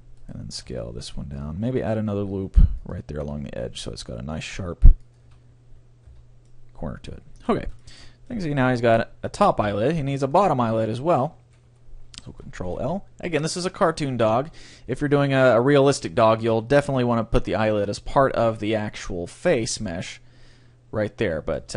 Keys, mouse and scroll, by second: 0.7 s, 0.9 right click, 2.2-3.7 drag, 2.3 ctrl+r, 5.1-6.9 drag, 5.3 a, 6.2 Tab, 6.5-9.9 middle drag, 9.6 KP_3, 10.1 Tab, 10.3 middle click, 11.1 click, 11.1 right click, 11.2 middle click, 12.1 middle click, 12.1 right click, 12.3 ctrl+l, 13.9 middle click, 14.5 middle click, 17.1-18.4 middle drag, 19.5-21.3 right drag, 21.7 Tab.